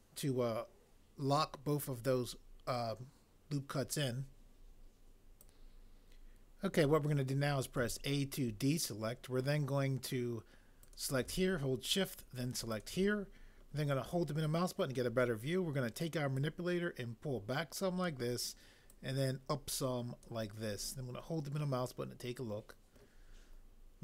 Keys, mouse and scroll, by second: 7.8 a.